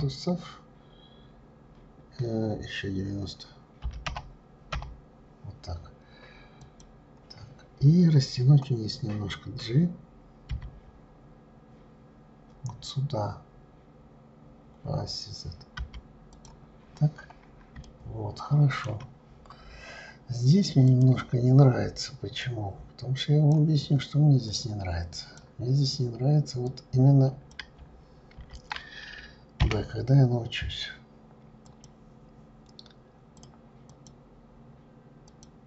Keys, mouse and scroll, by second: 10.5 g, 16.8-17.8 scroll up 4, 17.8-19.3 shift+middle drag, 19.3 scroll up 2, 20.9 click, 22.4-24.6 drag, 26.7 click, 28.4 ctrl+z, 29.6 b, 33.3 click, 33.9-35.6 drag.